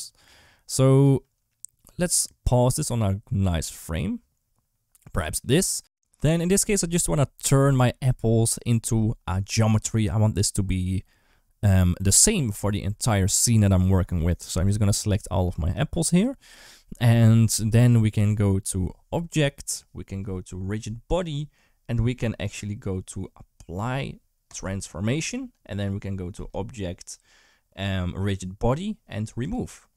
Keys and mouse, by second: 1.7 space, 14.5 click, 15.9 shift+click, 19.1-24.4 drag, 26.3-29.4 drag.